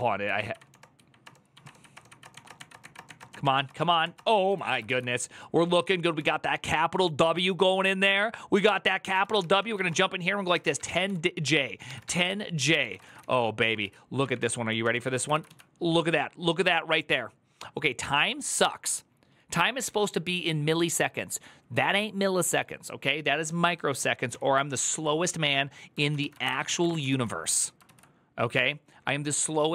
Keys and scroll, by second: 0.0 Up, 0.3 Up, 0.5 Return, 0.7 Up, 0.9 Up, 1.0 Return, 1.3 Up, 1.4 Return, 1.9 Up, 2.0 Return, 2.1 Up, 2.2 Return, 2.3 Up, 2.5 Return, 2.6 Up, 2.7 Return, 2.8 Up, 2.8 Return, 3.0 Return, 3.1 Up, 3.2 Return, 3.3 Up, 3.5 Return, 3.6 Up, 3.7 Return, 3.8 Up, 3.9 Return, 4.3 ctrl+a, 4.5 [, 4.6 ctrl+u, 5.9-15.1 typing, 14.6 Return, 15.0 ctrl+a, 15.3 ctrl+u, 24.4 ctrl+c, 24.4 q, 24.6 ctrl+c, 24.7 ctrl+c, 25.8 ctrl+a, 25.9-27.1 typing, 26.2 ctrl+c, 27.6 ctrl+u, 28.3 j.